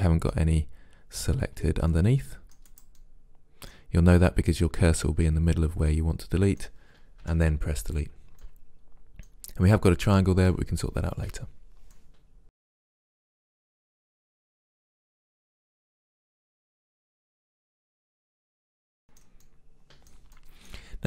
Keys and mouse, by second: 0.1 middle click, 1.6 c, 2.8 click, 3.0 middle click, 3.2-4.7 middle drag, 5.9 middle click, 7.3 Delete, 12.2 middle click, 12.6 right click, 12.9 Delete, 13.5 right click, 13.9 middle click, 14.3 middle click, 14.4 Delete, 14.4 right click, 15.1 right click, 15.7 middle click, 16.1 right click, 16.7 right click, 16.8 middle click, 17.3 Delete, 17.7 right click, 18.1 middle click, 18.7 Delete.